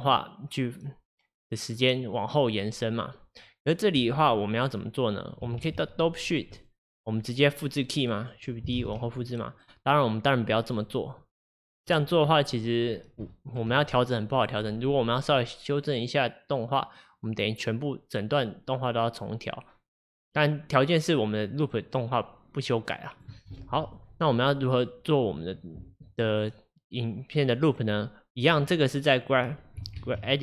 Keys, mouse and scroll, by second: 5.7 ctrl+Tab, 7.3-8.9 drag, 8.9 shift+d, 11.6-12.0 scroll down 1, 13.3-15.5 shift+middle drag, 15.5-18.5 drag, 24.3 click, 30.0 ctrl+Tab.